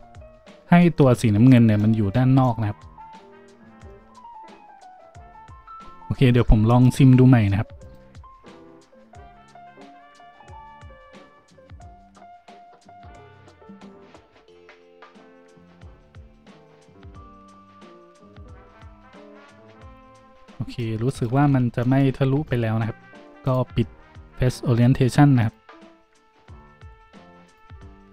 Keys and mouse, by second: 1.0-4.3 drag, 1.3 Tab, 7.8-28.1 drag, 20.2 z, 21.3 z.